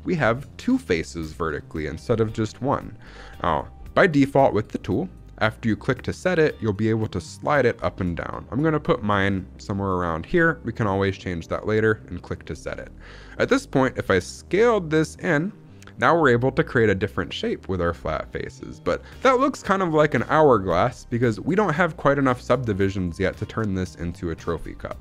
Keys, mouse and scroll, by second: 10.2-11.4 drag, 13.9 s.